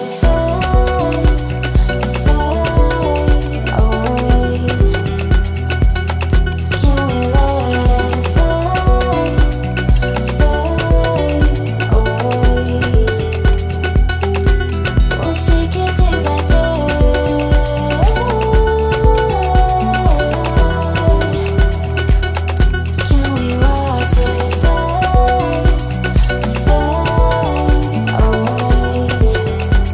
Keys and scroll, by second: 10.8 Delete, 12.1 Delete, 23.4 Delete, 27.3 ctrl+v.